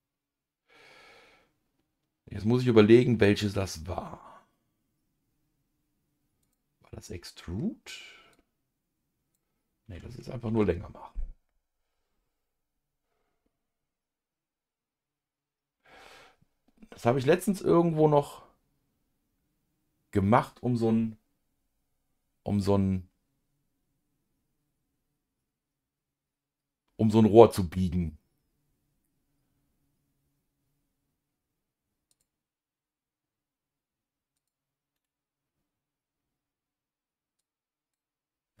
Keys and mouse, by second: 6.4 click, 8.3-10.3 drag, 10.4 ctrl+z, 32.1 click, 34.4 click, 34.9-36.0 right drag, 37.4 click.